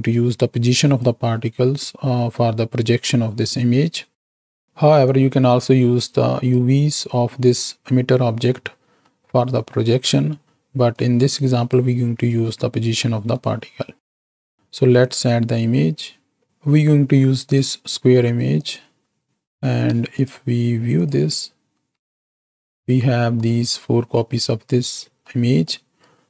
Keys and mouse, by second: 4.1-4.5 middle drag, 5.2-6.7 drag, 9.0-9.6 middle drag, 10.9-11.9 drag, 13.0 middle click, 14.0 middle click, 15.0 click, 19.3 click, 20.2 ctrl+shift+click, 21.5 ctrl+shift+click, 25.2 middle click.